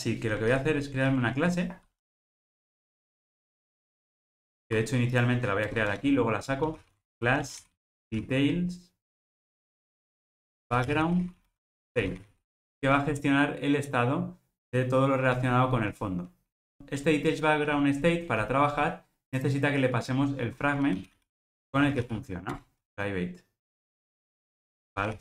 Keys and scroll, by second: 1.1 super+n, 22.5 Return.